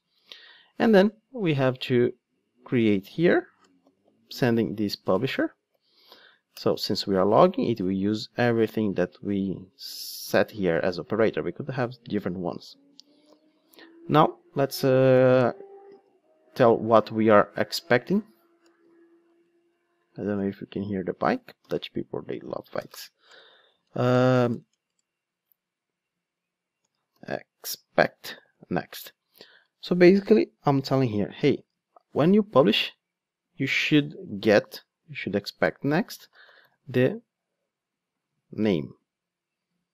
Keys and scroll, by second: 2.4 Return, 6.6 Return, 28.9 Return, 38.3 super+c.